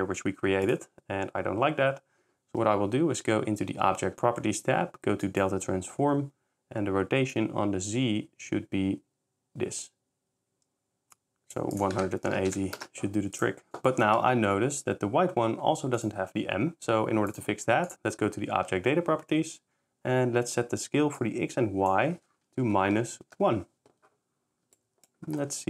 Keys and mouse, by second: 0.7 click, 5.3 click, 7.5-11.6 drag, 11.9 click, 13.7 click, 16.0 click, 21.2-23.3 drag, 24.9 s.